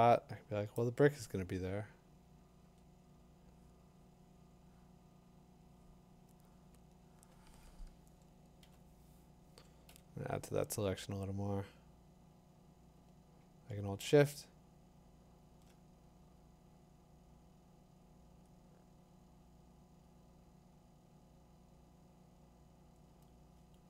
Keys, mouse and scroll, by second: 0.7-3.8 drag, 2.6 Tab, 8.6 b, 9.9 l, 11.7 l, 15.6 click, 19.7 click, 20.0 click, 21.1 click, 21.9 click.